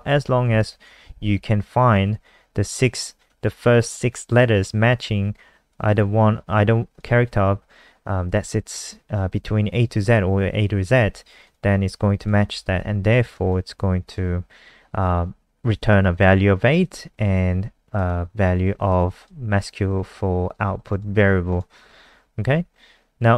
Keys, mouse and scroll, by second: 0.5 ctrl+shift+Left, 5.6 click, 12.4 ctrl+s, 12.7 F5, 13.4 alt+click, 17.9 click, 18.8 alt+click, 20.9 click.